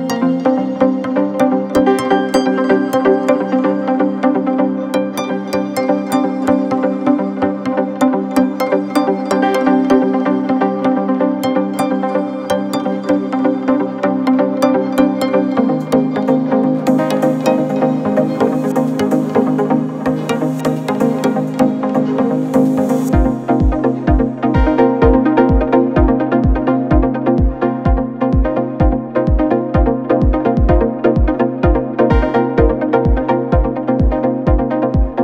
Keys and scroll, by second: 1.8 ctrl+z, 7.8 4, 13.9 4, 21.8 3, 27.7 4.